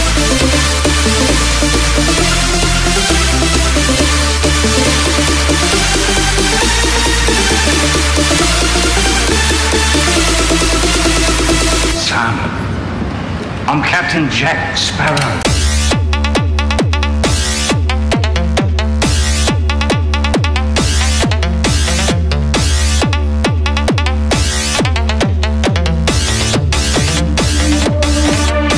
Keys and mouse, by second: 3.5 Tab, 10.8 click, 18.2 Tab, 20.2 KP_6.